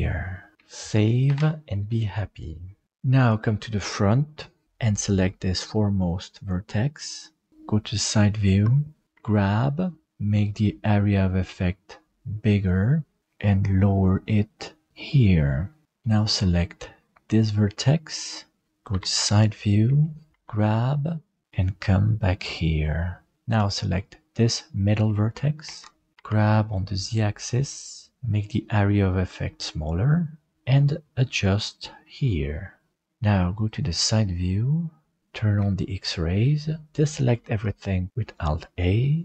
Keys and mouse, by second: 1.3 ctrl+s, 2.8 middle click, 7.5 KP_3, 9.1 g, 15.6 middle click, 17.2 right click, 18.0 middle click, 18.9 KP_3, 19.9 shift+middle click, 20.3 g, 23.3 alt+z, 23.3 middle click, 25.6 alt+z, 26.1 g, 35.5 alt+z, 37.2 alt+a.